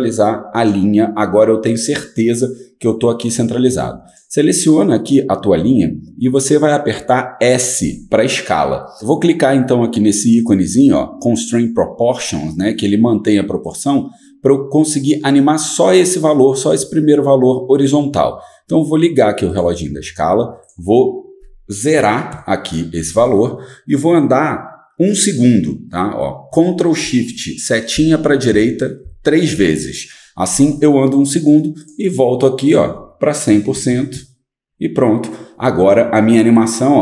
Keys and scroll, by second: 7.8 s, 21.9 0, 22.3 Return, 24.1 typing, 28.0 ctrl+shift+Right, 28.5 ctrl+shift+Right, 33.3-34.4 typing.